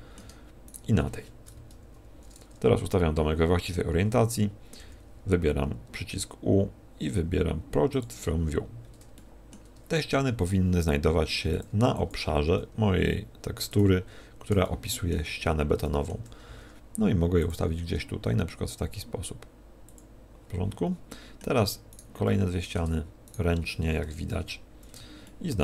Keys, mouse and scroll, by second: 0.6 shift+right click, 1.5 KP_1, 4.8 u, 10.1 shift+middle click, 10.1 scroll down 4, 10.1 g, 11.8 s, 12.5 s, 16.4 shift+middle click, 16.4 scroll down 2, 16.4 s, 17.5 click, 17.5 g, 20.6 click, 21.0 middle click, 21.9 right click, 22.2 middle click, 23.2 shift+right click, 24.2 KP_3, 25.2 shift+middle click.